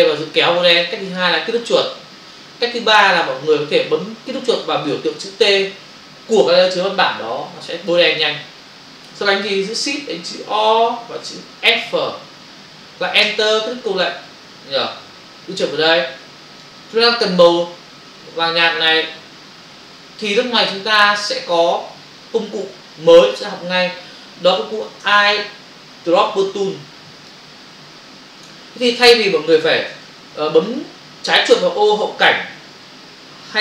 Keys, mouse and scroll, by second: 0.3 click, 1.1 click, 3.4 click, 8.1 click, 8.1 double click, 13.2 Return, 16.0 click, 26.4 click, 29.1 Return, 30.5 Return.